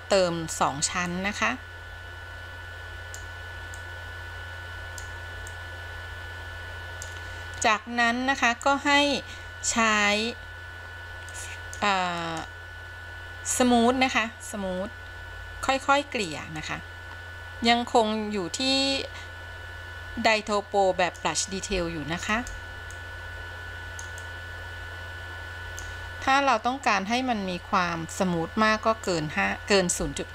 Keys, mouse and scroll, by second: 1.3-3.5 drag, 4.0-5.3 drag, 5.7-7.3 drag, 11.4 click, 12.3 click, 15.9-16.5 drag, 16.8-21.5 drag, 21.9 f, 22.6 f, 23.3-24.3 drag, 24.5-26.0 drag, 27.3-29.3 drag, 30.1 f.